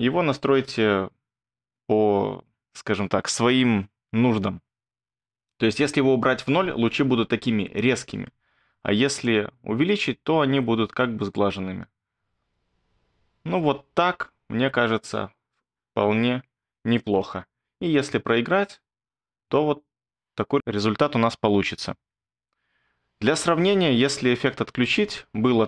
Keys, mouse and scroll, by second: 17.8 space, 22.1 space.